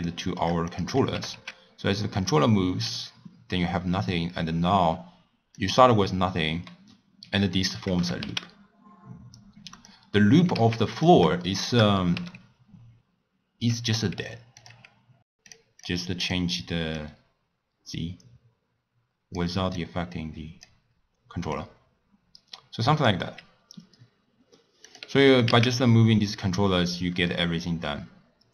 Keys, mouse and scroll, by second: 0.1-0.7 shift+middle drag, 0.7 click, 1.1 g, 8.0 g, 10.4 g, 11.4 shift+middle click, 12.1 n, 14.6 click, 15.4 click, 16.2 click, 16.9-24.5 drag, 24.8 click, 25.2 g.